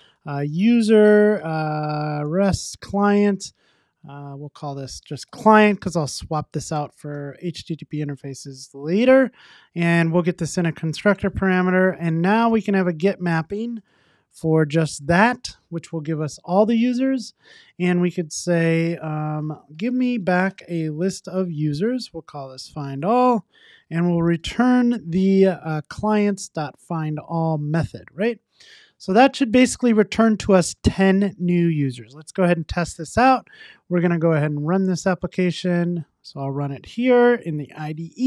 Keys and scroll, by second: 2.9 Return, 9.4 alt+Return, 13.2 Tab, 27.1 Tab, 28.1 super+s, 36.4 ctrl+r.